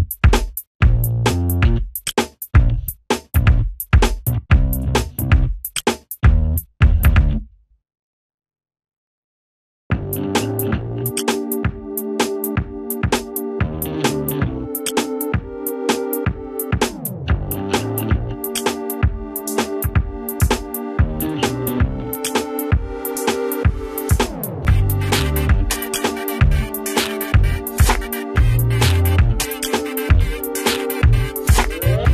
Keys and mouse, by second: 1.1 ctrl+space, 1.6 click, 2.2 right click, 3.1-5.3 drag, 5.3 right click, 6.1-10.9 drag, 10.9 space, 11.1-14.5 drag, 15.1 ctrl+space, 15.4 shift+click, 17.5 Delete, 18.2 ctrl+z, 19.1 click, 19.5 Delete, 20.4 F4, 21.9 click, 22.6 s, 25.3 F2, 25.6-29.0 drag, 29.0 shift+right click, 29.7 shift+click.